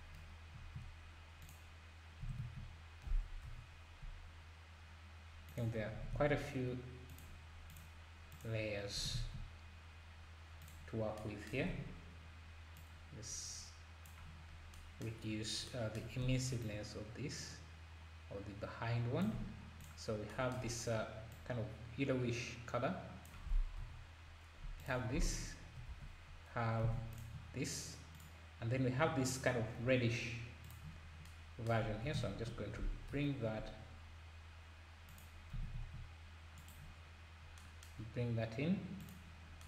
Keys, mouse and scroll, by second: 0.1-0.5 scroll up 1, 1.4 click, 7.7 drag, 8.3 click, 9.0 s, 11.7 ctrl+s, 12.8 click, 14.6 scroll down 1, 15.2 scroll up 3, 16.6-19.6 shift+drag, 16.6 scroll down 4, 19.8 shift+click, 21.3 click, 23.9 h, 24.8 click, 26.0 alt+h, 26.9 alt+a, 27.2 click, 30.8 click, 32.1 shift+d, 39.0-39.6 drag.